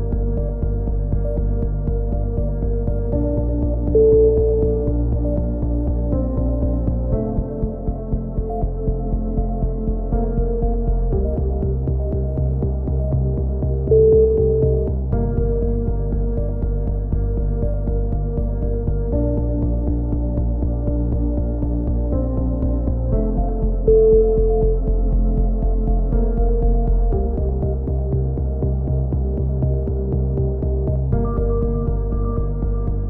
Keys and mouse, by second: 0.3 KP_7, 0.5 z, 8.8-12.1 typing, 9.6 click, 11.3 click, 12.0-13.0 drag, 12.3 Tab, 13.8 click, 13.9 z, 14.1 z, 14.3 Tab, 14.9 click, 15.3-16.3 drag, 15.6 right click, 16.3 right click, 17.0-18.4 drag, 17.4 ctrl+KP_7, 20.1 g, 22.3 a, 22.4 Tab, 22.6 click, 27.3 KP_1, 27.5 Tab, 29.0 z, 29.5 z, 29.7 click, 30.0 z, 30.8 click, 32.0 click, 32.7 a, 32.8 z.